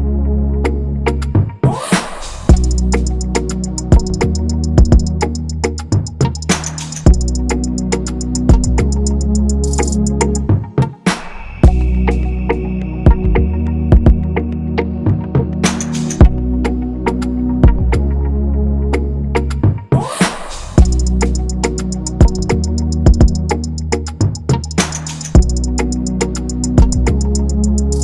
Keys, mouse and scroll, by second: 1.7-2.0 scroll, 2.2-3.8 scroll down 1, 8.3-8.8 scroll, 8.8 scroll down 1, 9.1-10.4 scroll, 12.9 ctrl+-, 13.8 scroll, 16.1-17.3 scroll, 17.3-18.9 scroll up 1, 20.8 BackSpace, 21.9 typing.